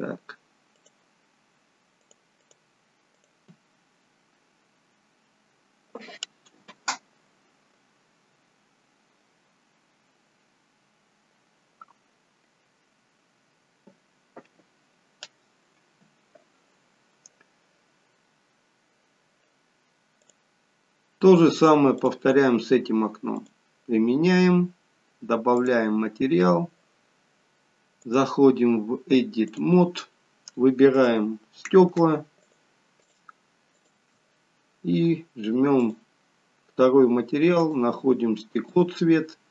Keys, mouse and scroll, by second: 1.6 click, 2.3 click, 20.1 click, 25.6 click, 30.9 click, 32.4 shift+click, 33.0 shift+click, 35.7 click, 37.6 click.